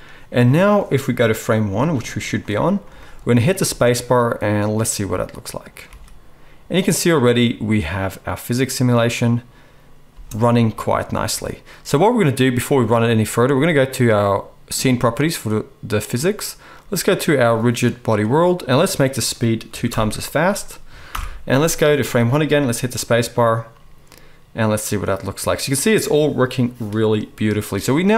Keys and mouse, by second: 3.6 space, 6.0 alt+a, 10.1 space, 14.8-18.0 middle drag, 18.0-28.1 drag, 21.0 shift+Left, 22.3 space.